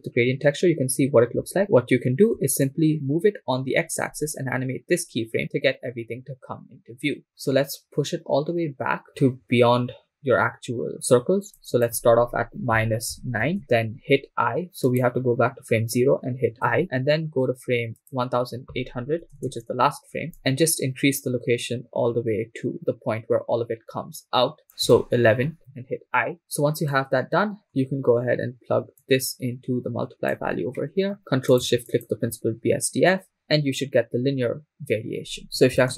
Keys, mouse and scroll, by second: 2.7-13.6 shift+drag, 15.1-16.8 drag, 16.8 i, 18.0-19.1 drag, 19.4 Right, 19.5 Right, 21.6-24.6 shift+drag, 26.4 click, 27.0 click, 27.8 middle click, 29.0-30.3 drag, 31.2 middle click, 31.5 click, 32.1 ctrl+shift+click.